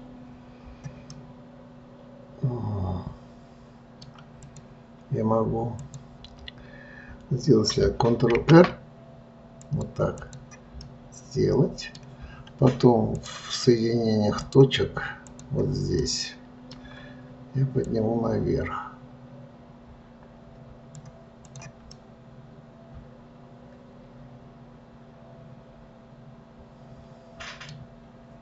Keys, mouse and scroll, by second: 1.5-4.5 middle drag, 4.8 click, 6.2 click, 8.7 ctrl+r, 11.2-13.5 middle drag, 13.5-14.9 drag, 15.7 click, 16.4-18.2 middle drag, 18.2 click, 21.8 click, 22.3-25.3 middle drag.